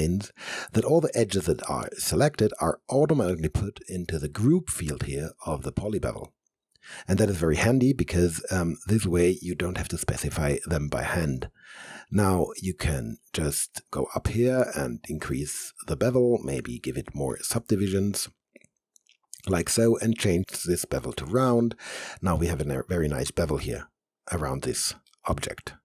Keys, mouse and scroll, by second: 13.4 right click, 13.8-16.5 middle drag, 16.5 click, 19.6-22.3 drag, 22.3-25.1 alt+drag, 25.1-25.8 alt+right drag.